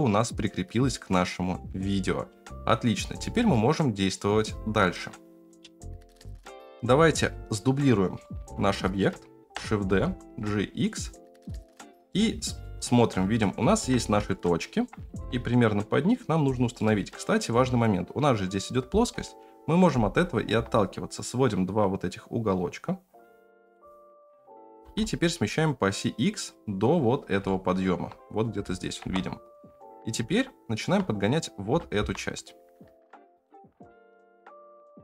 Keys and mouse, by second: 5.5 space, 6.3 F9, 7.2 click, 7.5 middle drag, 8.2 shift+middle drag, 8.6-9.0 middle drag, 9.4 shift+d, 12.1-12.6 middle drag, 13.4 shift+middle click, 14.3-14.8 shift+middle drag, 15.0 g, 16.7 middle click, 19.1 KP_1, 20.5 g, 24.7 g, 27.4-27.8 middle drag, 29.0 KP_0, 30.3-30.7 shift+middle drag, 31.7 g.